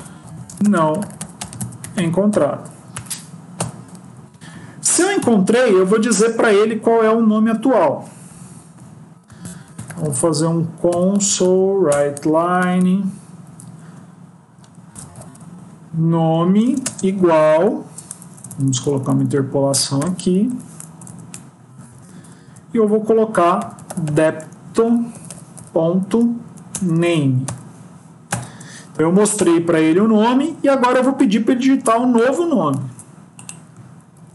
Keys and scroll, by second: 2.8 End, 4.0 Up, 4.2 Up, 11.9 Return, 18.1 ctrl+Left, 18.7 Left, 24.6 BackSpace, 26.3 Up, 26.6 Return, 27.3 End, 32.8 ctrl+x, 34.2 ctrl+v.